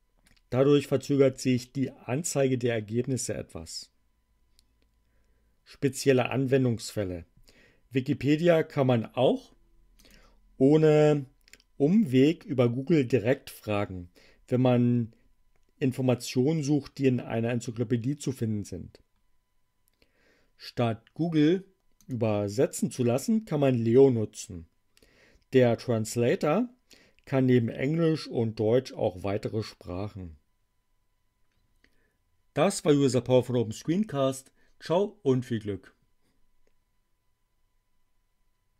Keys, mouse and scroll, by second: 10.0 click, 21.9 click.